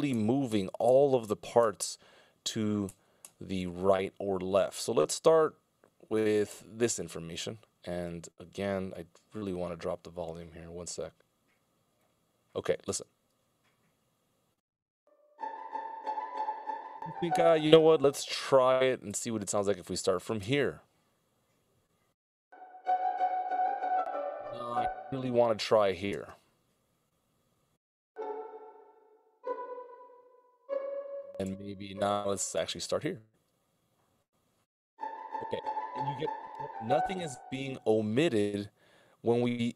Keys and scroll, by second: 0.4 alt+super+Right, 1.0 alt+super+Right, 1.6 alt+super+Right, 2.9 alt+super+Right, 3.9 alt+super+Left, 4.4 alt+super+Left, 5.0 alt+super+Left, 5.6 alt+super+Left, 6.0 alt+super+Left, 12.9 alt+space, 16.3 space, 17.8 Delete, 20.4 alt+space, 23.2 space, 24.6 alt+super+Left, 26.1 space, 31.3 alt+super+Left, 32.8 alt+space, 35.5 space.